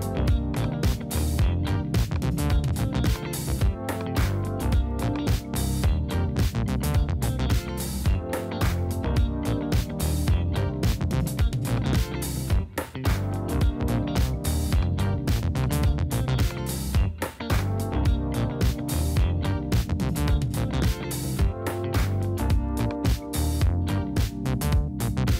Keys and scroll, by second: 6.1 space, 10.2 space, 11.9 BackSpace, 18.2 space, 21.6 space, 23.0 BackSpace.